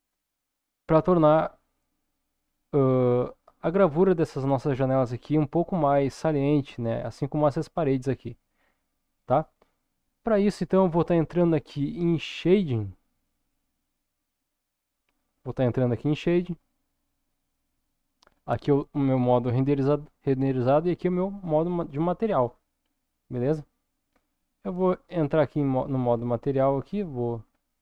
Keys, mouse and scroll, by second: 10.7 ctrl+s, 13.6 click, 17.3 click, 20.7 click, 21.9-22.9 scroll down 3, 22.9-24.3 middle drag, 24.6-25.1 scroll down 1, 25.4 middle click, 26.1-26.8 scroll down 2, 26.8-27.8 scroll up 4.